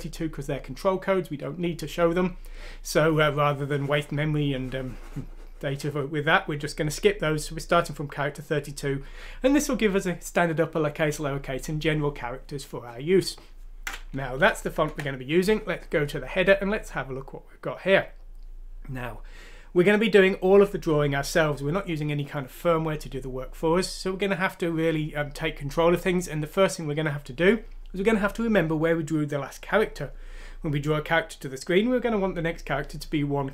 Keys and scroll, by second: 14.7 ctrl+Home.